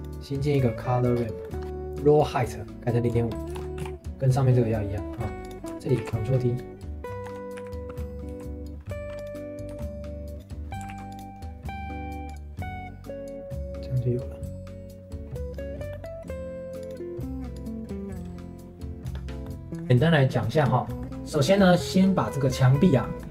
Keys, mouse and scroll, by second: 0.8 middle click, 1.1-1.7 scroll up 2, 1.4 middle click, 1.7 ctrl+s, 2.7-4.1 drag, 4.1 ctrl+s, 5.1 middle click, 5.4 click, 6.0 ctrl+t, 6.3 middle click, 6.8 ctrl+s, 7.2 Tab, 7.6 a, 9.7 Tab, 10.9 ctrl+s, 12.2-14.2 drag, 15.9 middle click, 16.8-19.3 drag, 19.4 middle click, 19.8 ctrl+s, 20.5 scroll down 1, 20.9 middle click, 21.1 ctrl+s, 23.0-23.3 middle drag.